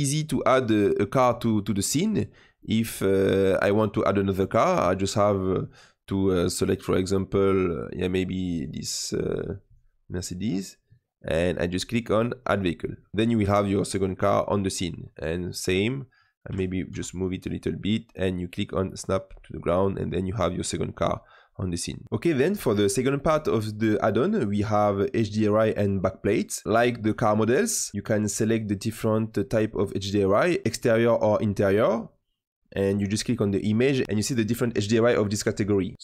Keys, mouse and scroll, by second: 1.9 click, 2.5-5.0 middle drag, 5.0 click, 5.4-13.1 drag, 16.4 g, 18.9-19.6 drag, 19.8-20.3 middle drag, 20.3-20.8 scroll up 3, 20.8-22.0 middle drag, 26.6-27.9 drag, 30.1 click.